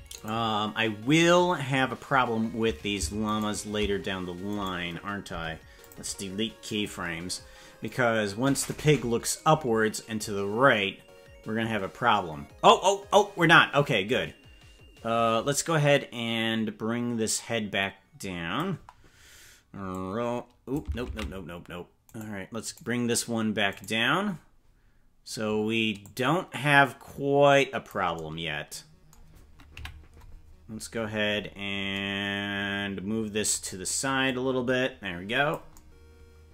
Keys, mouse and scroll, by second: 0.2 right click, 3.3 shift+right click, 4.4 right click, 5.3 Delete, 7.8-18.6 drag, 19.9 click, 21.4 ctrl+z, 22.2 right click, 22.8 right click, 23.8 right click, 24.4 scroll down 3, 26.0-27.9 drag, 29.8 KP_Decimal, 30.8-31.4 scroll down 7, 34.2-35.5 drag.